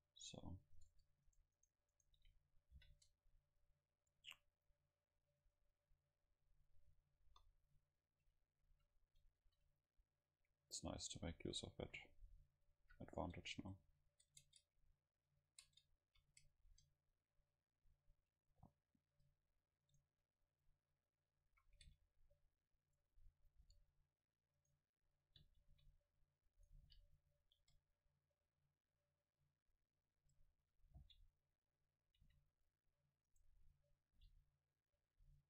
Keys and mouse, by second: 0.8-4.1 right drag, 2.8 ctrl+l, 5.5 right click, 6.7 middle click, 7.3 KP_0, 7.5 middle click, 8.3 a, 8.6 a, 8.8 a, 9.4 ctrl+s, 13.6 Tab, 14.2 Tab, 14.3 right click, 14.6 Tab, 15.7 Tab, 16.1 a, 16.7 ctrl+s, 19.4 Tab, 20.0 right click, 21.5 a, 21.9 c, 23.0-24.7 drag, 23.6 g, 23.7 c, 25.7 c, 26.7-29.8 drag, 26.9 g, 27.7 Tab, 28.4-30.1 middle drag, 30.3 Tab, 30.6 a, 31.0 v, 32.3 c, 33.4-35.3 drag, 34.2 g, 34.2 c, 35.2 r.